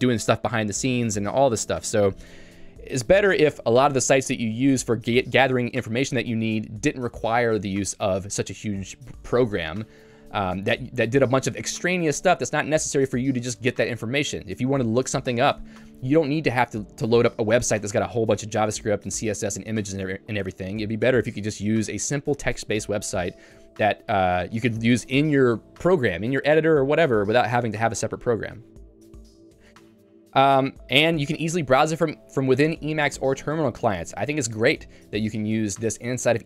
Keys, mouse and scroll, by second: 29.7 Escape, 30.2 j.